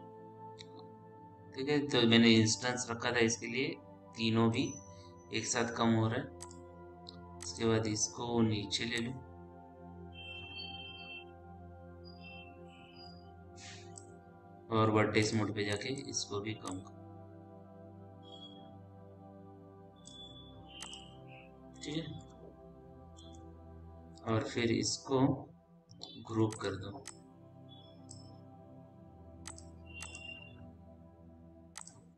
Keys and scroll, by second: 22.6 p.